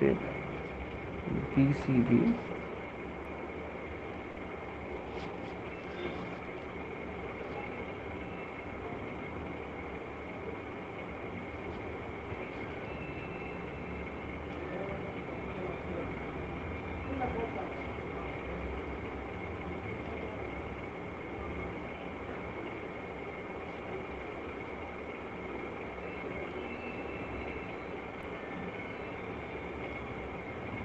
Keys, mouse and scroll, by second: 0.0 ctrl+z, 1.8-2.2 typing, 4.1 click, 4.5 click, 4.7 click, 5.9 click, 6.1 click, 9.0 alt+click, 9.3 alt+click, 10.5 click, 10.7 alt+click, 11.1 click, 11.5 click, 12.3 click, 14.0 click, 14.1 click, 14.6 click, 15.0 click, 15.2 click, 15.8 click, 16.4 click, 17.2 click, 18.1 click, 18.3 click, 18.9-22.9 drag, 23.7 click, 24.4 click, 27.5-27.9 shift+click, 28.2 click.